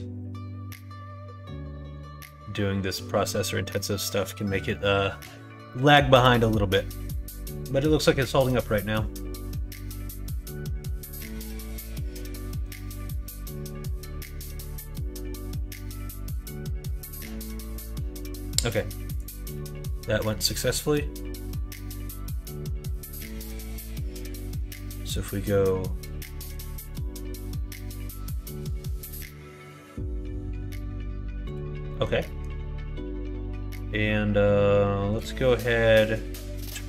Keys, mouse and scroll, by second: 20.2-21.7 middle drag, 22.3 middle click, 22.8 middle click, 23.3 middle click, 26.5-31.7 drag, 31.8 middle click, 32.2 middle click, 35.1 click.